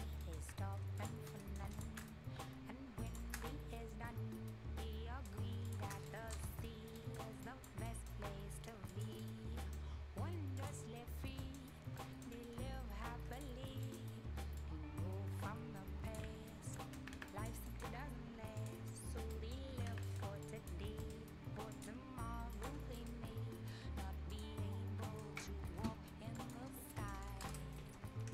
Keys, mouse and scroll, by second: 0.2 right click, 0.4 scroll down 1, 1.0 click, 1.2 scroll up 1, 1.3 right click, 1.7 click, 2.0 right click, 2.8 shift+scroll up 1, 3.1 shift+click, 3.3 shift+scroll down 1, 3.5-5.4 right drag, 5.4 scroll up 1, 5.7 click, 5.9 scroll down 1, 6.1 right click, 6.5 Delete, 6.6 scroll down 1, 6.8 scroll up 1, 7.0 right click, 7.4 click, 7.9 right click, 8.9 click, 9.2 right click, 9.9 scroll up 1, 10.6 click, 11.4 right click, 11.8 scroll up 1, 12.0 right click, 12.3 middle click, 12.4-13.3 scroll up 1, 13.3 click, 13.7 scroll down 1, 13.8 right click, 14.6 click, 16.6 scroll down 1, 16.7 right click, 17.0 Escape, 17.3 click, 17.7 right click, 18.6 click, 18.8-19.3 scroll up 1, 19.3 right click, 19.7 scroll down 1, 19.8 Escape, 19.9 scroll up 1, 20.0 right click, 20.4 click, 20.8 scroll up 1, 21.0 right click, 21.7 click, 22.8 scroll down 1, 22.9 right click, 24.3 click, 24.7 scroll down 1, 24.9 scroll up 1, 25.0 right click, 26.3 click, 26.7 scroll up 1, 26.9 right click, 27.4 Return, 27.6 scroll up 1, 28.1-28.3 scroll down 1.